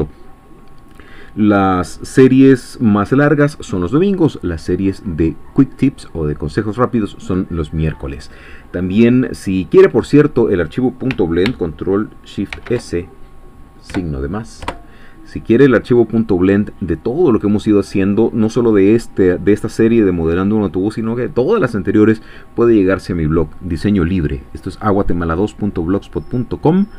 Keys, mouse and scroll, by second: 12.5 ctrl+shift+s, 14.6 Return.